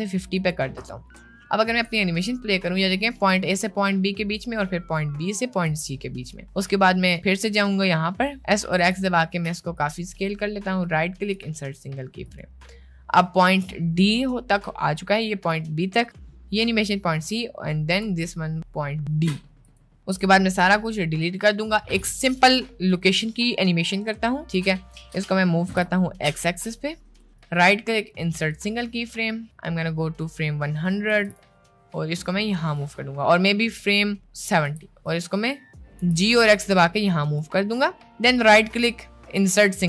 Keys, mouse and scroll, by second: 1.1-1.5 drag, 1.9 space, 5.8 space, 6.8 click, 8.6 s, 10.8 right click, 12.2 click, 13.7 space, 18.1 space, 20.2 a, 20.3 x, 23.0 click, 25.0 middle click, 25.7 g, 27.4-28.6 drag, 29.7-31.0 drag, 31.2 g, 34.0-34.4 drag, 34.8 g, 36.2 g, 38.4-39.8 right drag.